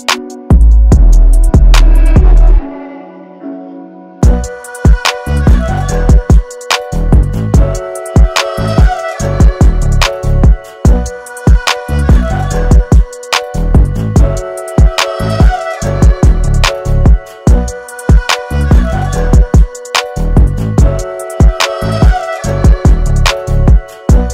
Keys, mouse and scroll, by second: 0.3 alt+scroll down 1, 0.6 space, 0.6 click, 1.2 alt+scroll up 1, 1.6 space, 1.7-7.1 drag, 7.1-14.3 ctrl+drag, 14.9-15.2 ctrl+scroll up 1, 15.5 alt+scroll up 1, 15.9 space, 15.9-18.2 drag, 18.2-21.5 ctrl+drag, 21.5 space, 22.9 click.